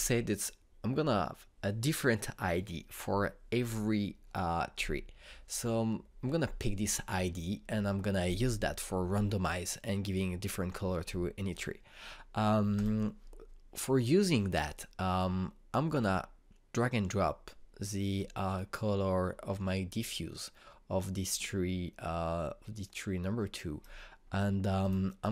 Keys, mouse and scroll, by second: 13.4 click, 17.4-25.3 drag.